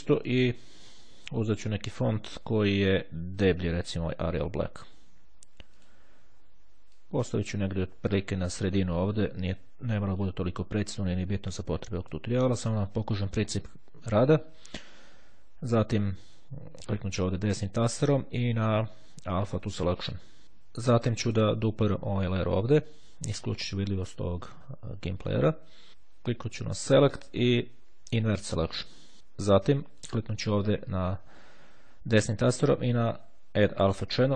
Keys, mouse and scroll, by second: 0.5 click, 2.5-3.9 drag, 5.9 click, 7.1-10.9 drag, 12.0 click, 16.7-17.9 right drag, 20.1 click, 21.3 click, 22.4 click, 23.7 click, 26.7 click, 28.4 click, 29.9 right click, 33.7 click.